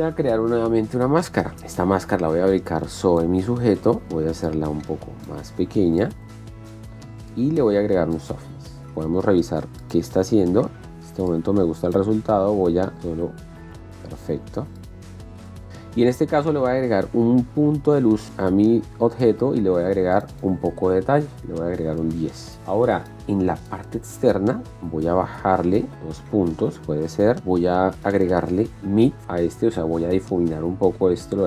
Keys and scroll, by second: 22.1 KP_1, 22.4 KP_0, 22.6 Return.